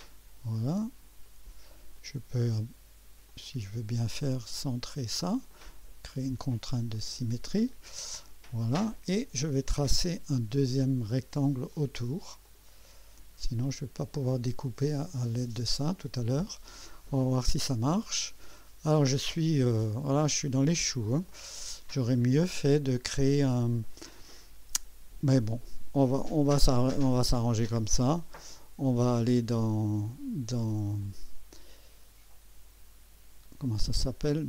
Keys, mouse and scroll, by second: 1.2 click, 2.0 right click, 3.3 click, 4.3 click, 5.5 click, 6.9 click, 11.1 click, 12.4 click, 13.6 click, 16.0 click, 17.3-20.8 drag, 21.3-24.0 drag, 28.2 right click, 31.0 click.